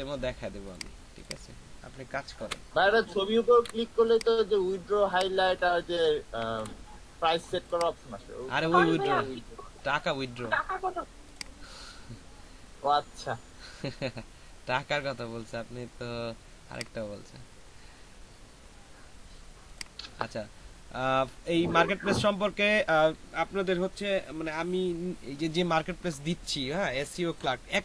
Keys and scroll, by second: 2.3 ctrl+a, 3.0 ctrl+a, 3.5 ctrl+c, 6.3 ctrl+v.